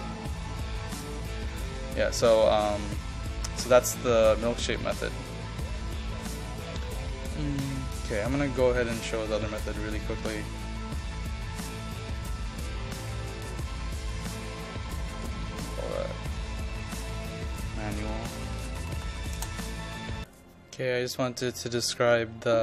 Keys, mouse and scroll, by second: 2.7-3.1 scroll down 1, 3.1 scroll up 1, 3.5 ctrl+click, 4.1-5.6 drag, 6.0 ctrl+click, 7.2 click, 8.2-14.7 ctrl+drag, 17.7-19.8 typing.